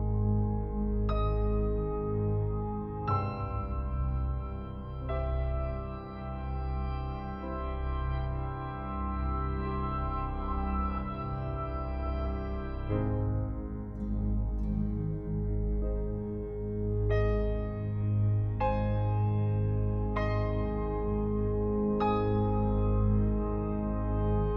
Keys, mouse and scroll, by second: 0.1 ctrl+l, 1.3 click, 11.1 Return, 11.5-11.9 scroll down 1, 14.8 click, 17.6 click, 20.8 click, 22.6-22.9 scroll up 1, 22.9-23.4 scroll down 1.